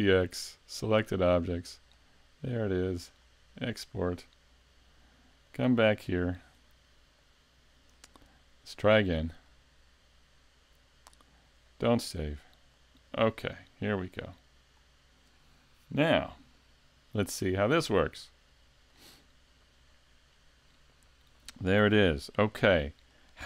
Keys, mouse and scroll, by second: 3.4 click.